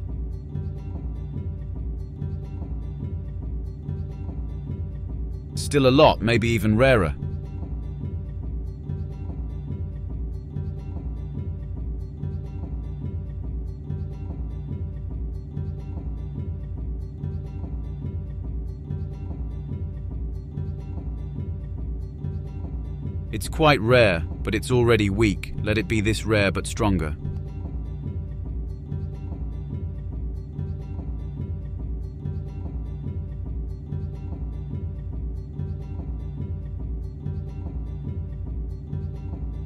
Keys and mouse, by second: 7.2 click, 10.7-14.7 drag, 14.4 Delete, 15.1-16.3 drag, 16.0 Delete, 17.4-18.1 drag, 19.2 click, 28.0 click, 29.8 click, 33.1-35.4 drag, 37.6 click.